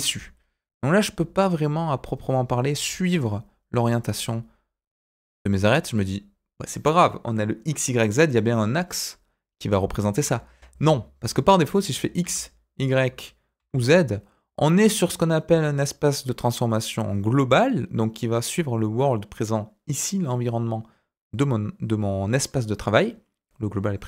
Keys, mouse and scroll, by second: 20.1-22.9 middle drag.